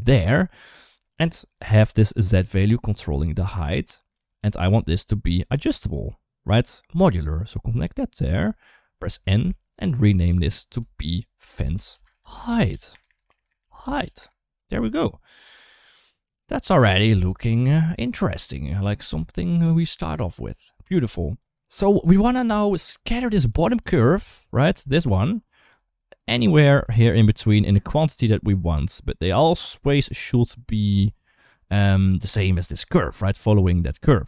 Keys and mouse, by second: 1.3 click, 2.1 click, 3.0 shift+click, 4.6 shift+click, 6.9 click, 7.0 click, 9.2 n, 10.0 click, 12.9 BackSpace, 13.0 BackSpace, 13.3 BackSpace, 15.7 click, 17.5 ctrl+s, 17.6 shift+middle click, 21.2 click, 21.4 click, 21.4 ctrl+x, 21.4 ctrl+s, 23.4 click, 23.5 click, 23.6-27.4 typing, 24.3 right click, 24.7 click, 26.0 click, 26.9 click, 28.4-30.7 right drag.